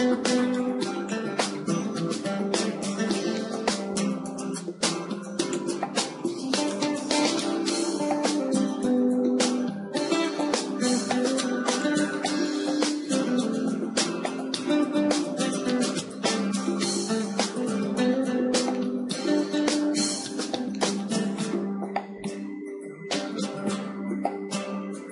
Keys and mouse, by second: 1.6-3.3 drag, 5.5 s, 5.9-8.8 drag, 11.0 s, 12.2-15.0 drag, 17.7-19.7 drag, 19.3 s, 21.0-24.0 drag.